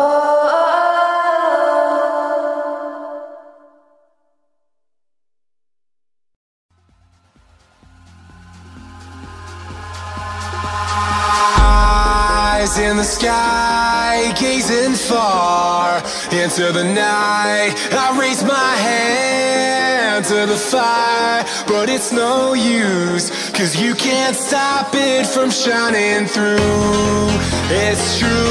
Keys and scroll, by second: 0.1 ctrl+z, 0.2 ctrl+space, 0.5 Escape, 0.7 ctrl+space, 1.1-4.5 typing, 5.1 ctrl+space, 5.7 x, 6.4 space, 8.6 x, 10.5 ctrl+z, 11.6 ctrl+0, 13.4 b, 13.7 ctrl+space, 14.7 space, 15.1 x, 15.7 ctrl+z, 19.3 ctrl+z, 20.1 x, 21.4 ctrl+z, 21.9 space, 25.0 space, 25.3 z, 26.7 space, 27.9 space, 28.2 z.